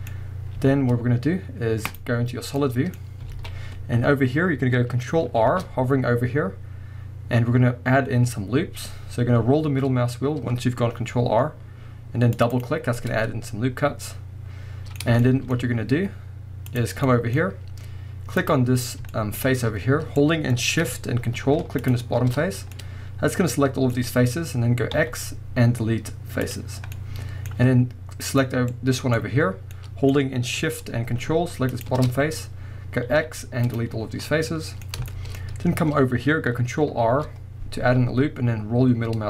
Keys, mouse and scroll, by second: 0.6 z, 2.4 scroll down 1, 2.6 middle click, 2.9-3.3 scroll up 1, 3.3 alt+a, 5.5 ctrl+r, 12.6 click, 12.8 scroll down 1, 13.0-16.7 middle drag, 16.7 click, 17.0-18.4 scroll up 2, 17.1-18.4 middle drag, 18.4 click, 18.8-19.1 scroll down 1, 19.1-21.8 shift+middle drag, 21.8 ctrl+shift+click, 22.7-28.2 middle drag, 23.9-24.9 scroll up 2, 24.9 x, 26.8 scroll up 2, 28.2 click, 28.7-30.6 scroll up 2, 30.6-31.7 middle drag, 31.7 ctrl+shift+click, 33.1 x, 34.0-34.3 scroll down 2, 34.3-39.2 middle drag, 34.8 scroll up 2, 35.4-35.9 scroll up 1, 37.0 ctrl+r.